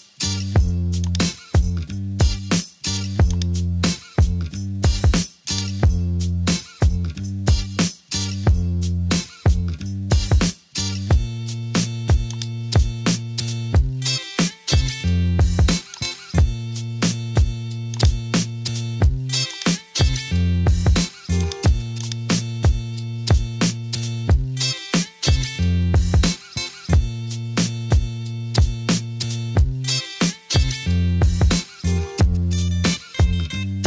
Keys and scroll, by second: 0.0 typing, 2.0 super+t, 4.9 Return.